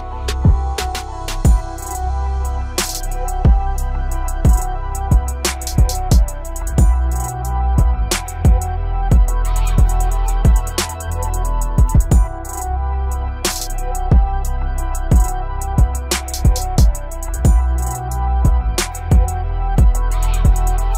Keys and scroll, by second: 3.8 ctrl+g, 8.3 ctrl+c, 10.2 ctrl+b.